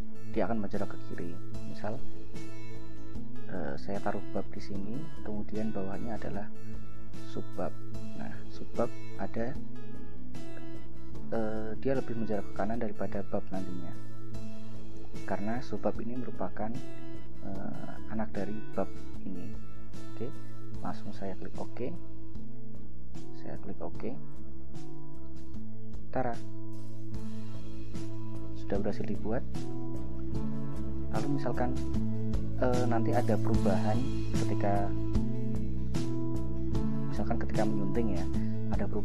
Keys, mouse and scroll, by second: 3.8 click, 7.8 click, 9.0 click, 15.1 click, 21.6 click, 24.4 click, 26.3 scroll down 2, 27.7 click.